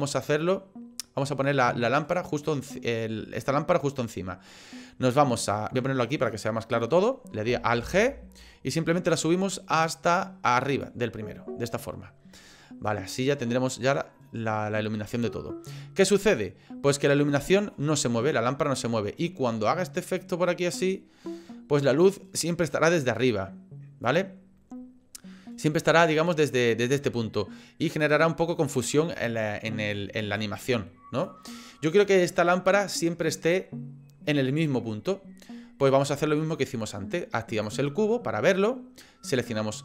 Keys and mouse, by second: 6.2 click, 7.8 alt+g, 8.9-10.8 drag, 12.9-20.0 drag, 20.0-22.6 middle drag, 22.6-24.1 drag, 26.2-28.5 drag, 30.4 click, 35.4 click, 37.6 click.